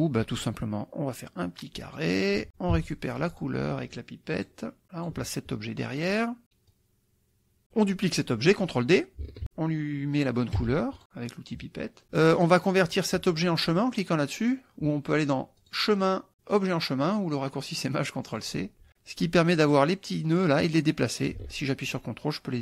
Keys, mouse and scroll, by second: 0.4-2.2 drag, 2.8 d, 3.3 click, 4.4 click, 4.8 click, 6.0 click, 6.7-7.9 drag, 9.4 ctrl+d, 10.7 d, 11.0 click, 15.7 click, 18.3 click, 20.5-22.6 drag.